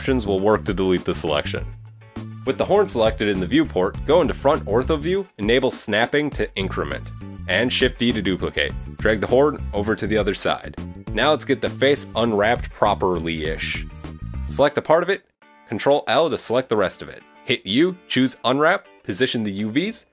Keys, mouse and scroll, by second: 0.4 right click, 0.7 right click, 1.2 ctrl+l, 1.3 click, 1.4 click, 1.5 middle click, 2.0-2.6 scroll up 2, 3.2 middle click, 3.4 KP_1, 4.5 shift+d, 5.8 click, 6.8 g, 7.6 middle click, 8.0-8.5 scroll down 2, 8.3 middle click, 9.2-9.7 scroll up 1, 12.5 right click, 13.8 click, 14.1 right click, 14.4 shift+right click, 14.6 shift+right click, 14.9 shift+right click, 15.1-15.8 scroll down 6, 16.0 ctrl+l, 18.9-20.1 typing, 19.1 scroll down 3, 19.9-20.1 scroll up 4.